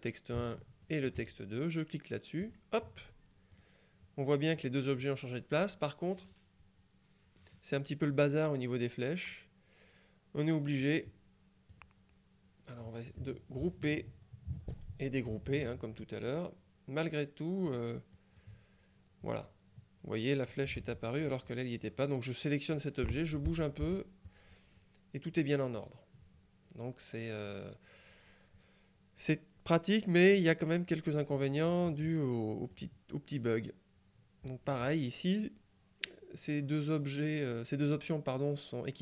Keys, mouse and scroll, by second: 0.9 shift+click, 2.5 click, 3.7 click, 11.8-13.4 drag, 13.7 ctrl+g, 15.4 g, 16.4 click, 17.8 click, 20.9 ctrl+z, 21.3 ctrl+click, 23.6 Left, 23.9 Right, 25.9 click, 32.8 click.